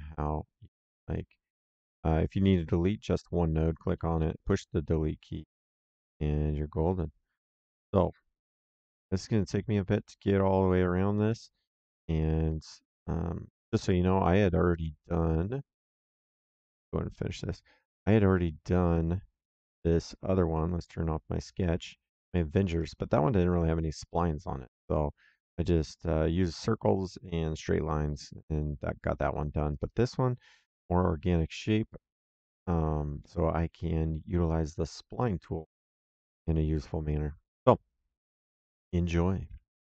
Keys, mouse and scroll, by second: 1.4 click, 3.1 click, 7.7 click, 9.9 middle click, 12.8 middle click, 13.8 right click, 17.0 click, 18.8 click, 21.4 click, 22.3 middle click, 22.7 right click, 27.1 middle click, 29.6 click, 32.2 click, 33.1 middle click.